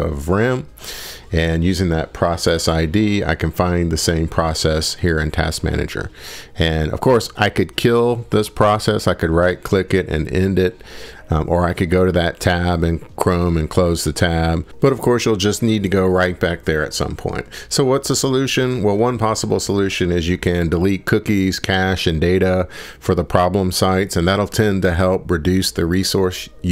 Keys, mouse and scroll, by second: 16.3 click, 17.0 click, 18.7 click, 19.0 middle click, 21.0 click, 22.3 click, 25.8 click.